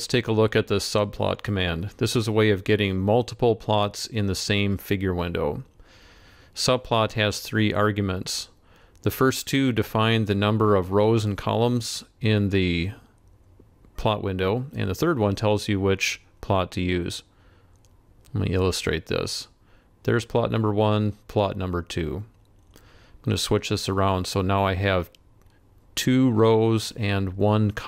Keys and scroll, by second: 13.4 ctrl+c, 14.2 ctrl+v.